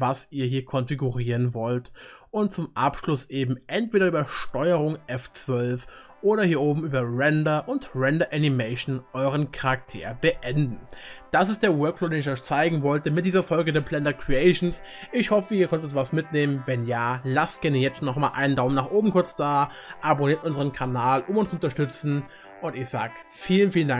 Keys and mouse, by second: 18.8 middle click.